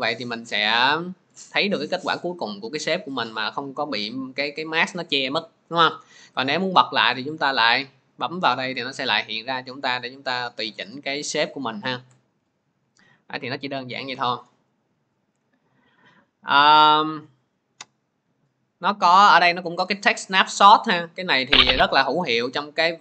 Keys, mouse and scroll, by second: 1.2 click, 1.5 middle click, 7.4 click, 10.7 click, 12.2 ctrl+z, 13.5 click, 14.0 m, 14.6 click, 15.1 Delete, 21.2 click, 22.7 middle click.